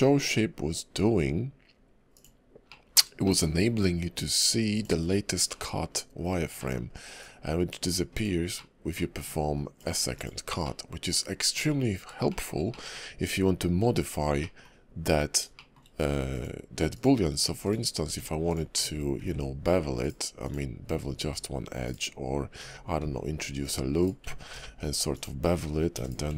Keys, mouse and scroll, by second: 2.7 middle click, 3.2 shift+middle click, 3.8 click, 5.4 middle click, 6.5 middle click, 7.1 click, 8.5 middle click, 9.2 click, 10.6 middle click, 12.3 shift+middle click, 12.7 middle click, 14.4 middle click, 15.5 shift+middle click, 16.3 click, 16.9 click, 17.6 click, 18.0 Tab, 18.4 click, 19.2 ctrl+b, 20.4 click, 21.2 ctrl+b, 23.0 ctrl+r, 24.5 ctrl+b, 25.9 e.